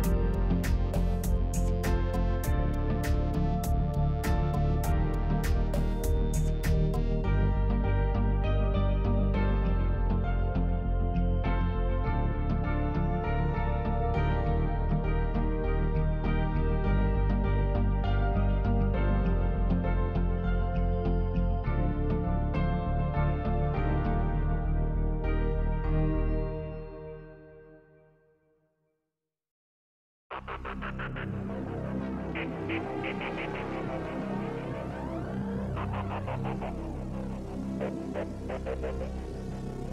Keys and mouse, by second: 0.3 Tab, 0.6-2.7 middle drag, 3.3 KP_3, 4.9 shift+middle click, 6.4 shift+middle click, 7.5 shift+middle click, 8.1 middle click, 9.0 Tab, 9.3-10.4 middle drag, 13.4 w, 13.5 w, 13.9-15.3 drag, 15.5 w, 15.6 w, 16.8 g, 18.9 3, 19.7-21.1 drag, 22.0 KP_3, 23.9 middle click, 25.9 1, 26.4 alt+z, 27.5-29.3 drag, 29.8 g, 32.4 click, 33.4 g, 34.9 click, 36.0 middle click, 37.4 ctrl+click, 38.7 ctrl+click.